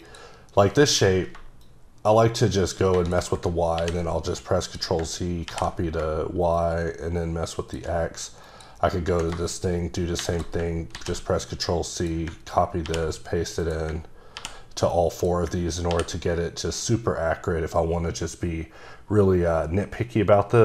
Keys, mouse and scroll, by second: 0.0 click, 1.6 click, 3.8 ctrl+c, 4.6 click, 5.5 ctrl+v, 6.6 shift+click, 10.9 c, 11.9 click, 12.8 ctrl+v, 13.6 click, 14.4 ctrl+v, 15.1 click, 15.9 ctrl+v.